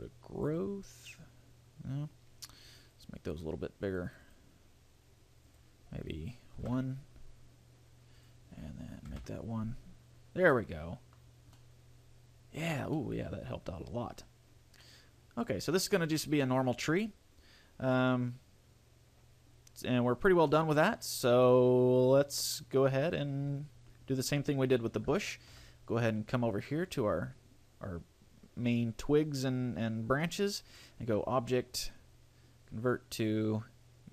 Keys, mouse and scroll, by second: 2.0-2.8 scroll up 2, 2.8 click, 4.3 click, 5.0 click, 5.6 click, 8.4 click, 10.7 middle click, 11.4 scroll down 3, 11.8 middle click, 13.2 middle click, 14.6-15.0 scroll up 2, 15.0 middle click, 16.1 middle click, 20.7 middle click, 25.4 shift+middle click, 25.8 scroll down 1, 27.0 right click, 31.0 click.